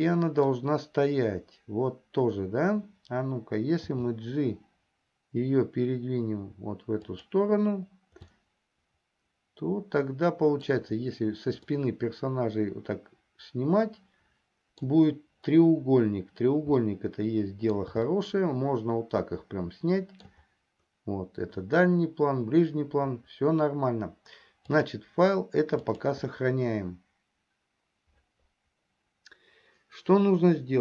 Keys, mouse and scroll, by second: 4.3 g, 8.8-11.3 shift+middle drag, 12.3-15.6 middle drag, 17.5 middle click, 18.7-21.1 shift+middle drag, 24.8-28.2 drag.